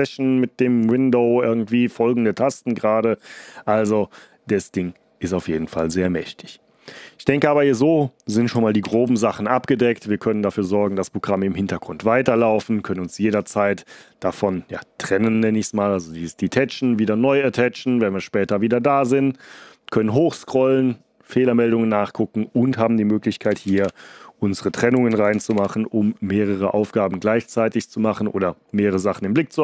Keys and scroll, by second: 8.8 ctrl+l, 23.4 ctrl+b, 23.7 ", 25.0 ctrl+b, 25.4 %.